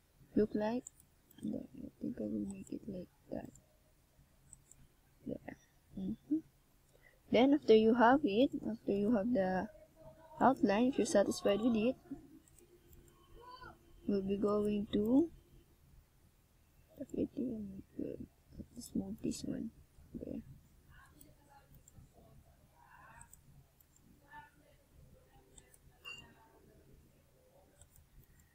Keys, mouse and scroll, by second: 7.9 click, 8.3 click, 10.5 click, 12.0 click, 12.7 click, 14.7 click, 15.3 click, 16.8 click, 17.4 click, 22.1 shift+click, 22.8-23.8 scroll down 2, 23.8 KP_0, 25.9 s.